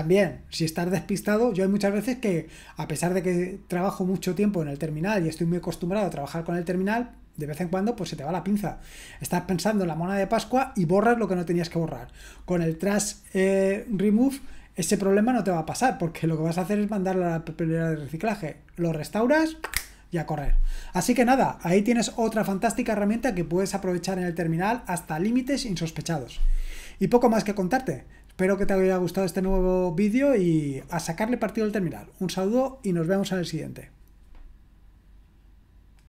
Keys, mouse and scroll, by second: 36.0 click.